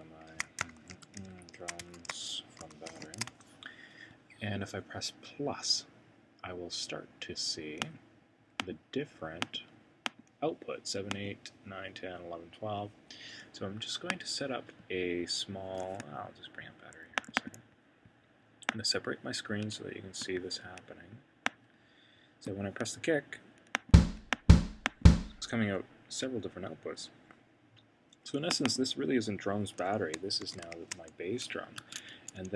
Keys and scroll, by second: 0.0-4.6 typing, 30.2-31.2 typing.